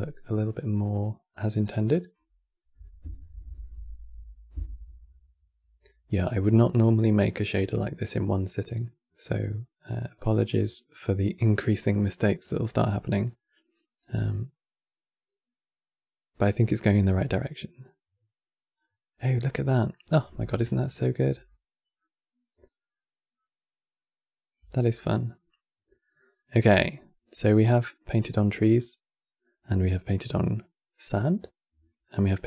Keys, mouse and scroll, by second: 13.0-13.5 scroll down 3, 18.6 scroll down 2, 19.3-19.6 scroll down 1, 19.6-22.0 middle drag, 22.0-22.5 scroll up 2, 22.6-24.3 middle drag, 24.3 q, 26.0-31.4 middle drag, 31.7-32.4 shift+middle drag.